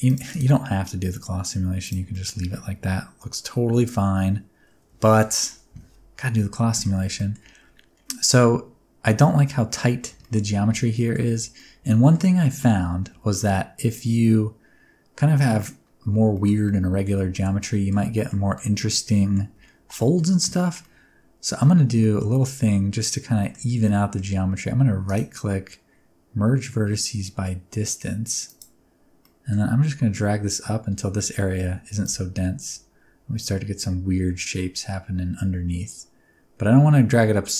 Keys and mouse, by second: 0.3-1.9 drag, 2.1-3.8 middle drag, 5.1 shift+middle click, 5.7 Tab, 6.4 middle click, 7.2 middle click, 10.2 shift+middle click, 11.0 shift+middle click, 11.6 middle click, 12.5 shift+middle click, 13.1 1, 13.4-15.4 middle drag, 16.3 shift+middle click, 16.6 middle click, 17.3 shift+middle click, 17.6 middle click, 18.2 shift+middle click, 18.5 middle click, 20.1 middle click, 20.8 middle click, 22.0 middle click, 23.4 shift+middle click, 23.8 middle click, 25.1-28.6 middle drag, 28.6 click, 29.2 middle click, 32.0-37.5 shift+drag.